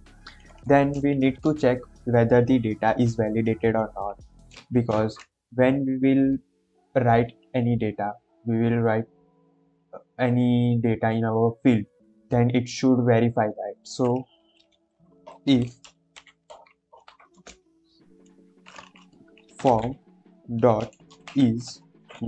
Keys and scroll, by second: 0.5 Right, 0.8 Left, 15.2-17.3 typing, 19.4-21.2 typing, 21.9 Down, 22.1 Down.